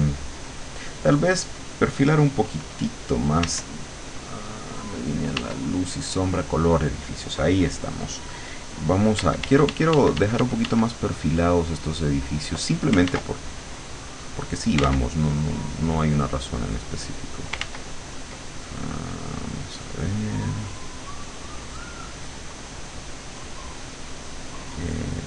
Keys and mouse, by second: 3.5 w, 5.4 w, 9.2 d, 11.8 click, 13.2 ctrl+z, 13.6 ctrl+click, 14.2 click, 14.9 ctrl+z, 15.4 ctrl+click, 15.8 ctrl+click, 17.7 ctrl+z, 19.2 click, 20.6 click, 21.3 click, 21.7 click, 22.2 click, 22.8 click, 23.3 click, 24.0 click, 24.9 click.